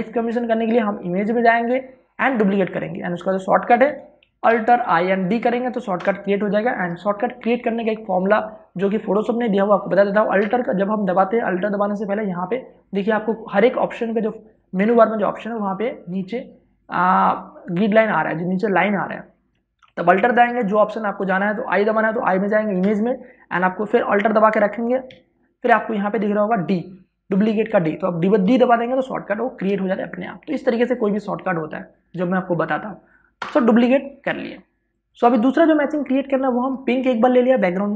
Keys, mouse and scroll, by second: 4.5 Escape, 5.1 alt+i, 5.5 d, 6.6 Return, 23.5 alt+i, 29.1 d, 34.1 Return, 35.1 click, 35.3 space, 35.5 ctrl+click, 36.3-37.9 drag.